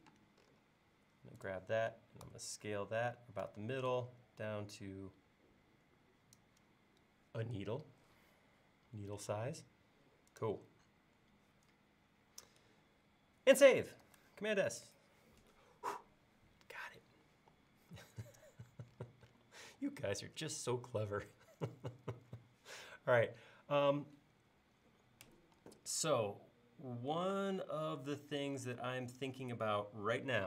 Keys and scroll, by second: 0.1 space, 2.3 s, 9.3 space, 14.1 super+s, 25.6 e, 28.8 space.